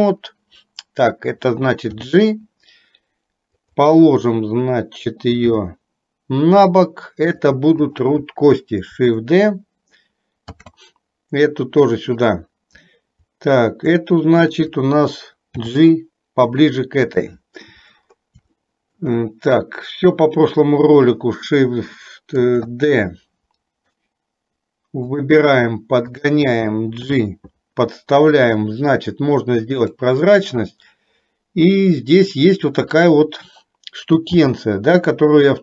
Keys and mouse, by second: 2.0 g, 5.5 g, 8.0 click, 10.6 shift+d, 15.6 g, 18.5 shift+middle click, 22.5 shift+d, 27.1 g, 34.4 g.